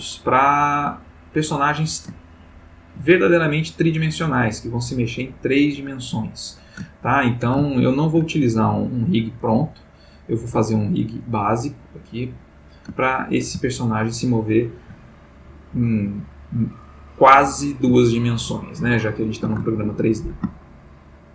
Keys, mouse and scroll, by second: 2.2-3.1 ctrl+middle drag, 3.2-4.5 ctrl+middle drag, 5.8-6.8 middle drag, 6.9-7.6 ctrl+middle drag, 7.7-9.3 ctrl+shift+middle drag, 9.6-10.4 middle drag, 10.5 x, 10.9 click, 12.1 click, 12.9-13.5 ctrl+middle drag, 13.8-15.0 ctrl+shift+middle drag, 16.0 click, 18.8-19.5 shift+middle drag, 19.8-20.5 ctrl+shift+middle drag, 20.7-21.3 ctrl+shift+middle drag.